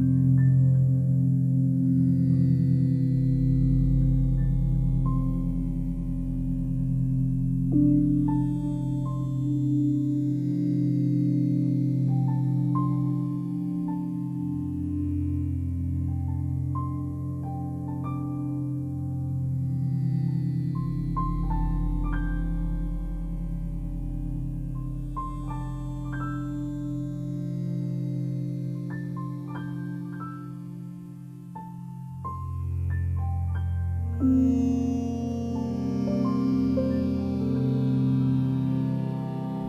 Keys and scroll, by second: 25.4 ctrl+z.